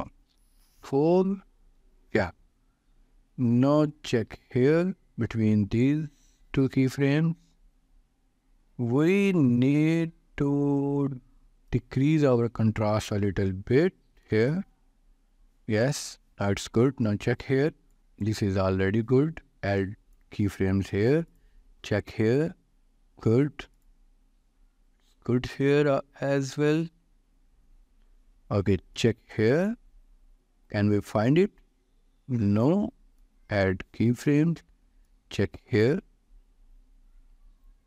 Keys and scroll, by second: 0.6 4, 1.0 Return, 13.4-14.3 typing.